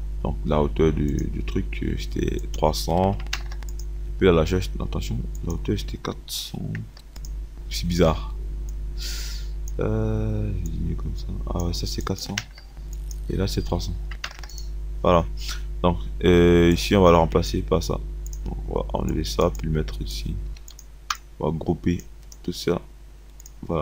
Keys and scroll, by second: 3.2 KP_3, 3.6 KP_0, 6.1 KP_4, 6.9 KP_0, 12.3 KP_4, 13.4 KP_0, 13.7 KP_3, 14.4 KP_0, 21.1 Delete.